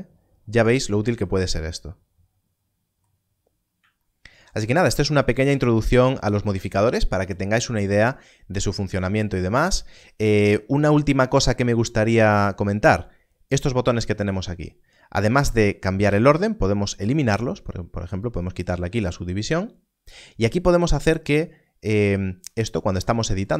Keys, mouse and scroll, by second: 3.3-3.7 scroll up 1, 18.2 click, 22.6 click, 22.9 Tab.